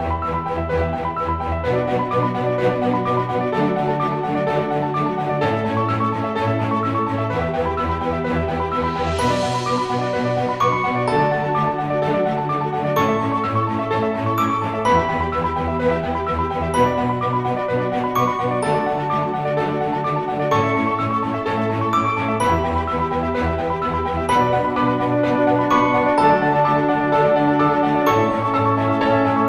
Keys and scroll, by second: 0.6-2.2 typing, 3.3-11.4 typing, 15.2-16.4 typing, 18.8 typing, 19.0 ctrl+z, 25.1 ctrl+z, 26.1 ctrl+z, 28.1 ctrl+shift+z.